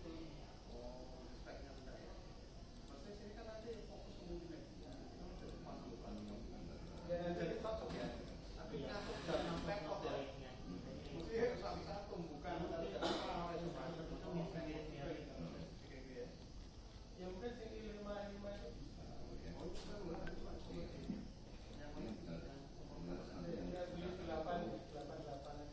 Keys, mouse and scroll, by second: 2.9-7.5 drag, 7.6-10.9 drag, 11.3-12.8 right drag, 13.2-18.3 middle drag, 19.7-25.7 drag.